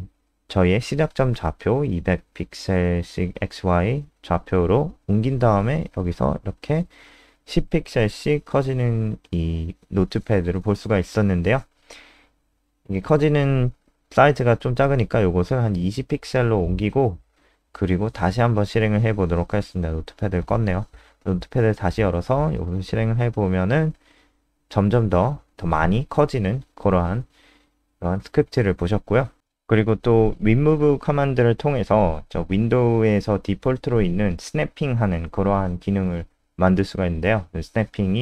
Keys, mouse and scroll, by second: 0.5 click, 5.7 F5, 10.5 alt+click, 11.5 alt+F4, 11.7 click, 12.8 Down, 12.9 Down, 13.8 End, 14.0-15.7 typing, 14.9 Down, 16.5 F5, 19.3 click, 19.7 click, 20.5 super+n, 21.6 click, 21.9 alt+click, 22.3 click, 22.5 ctrl+s, 24.9 F5, 28.1 click, 28.3 alt+4, 28.9 click, 29.2 alt+F4, 29.4 click, 30.1-30.5 scroll down 2, 31.4 click, 32.3 Up, 32.4 Up, 32.6 Down, 32.7 Down, 33.3 shift+click, 33.9 shift+Down, 34.9-35.8 typing.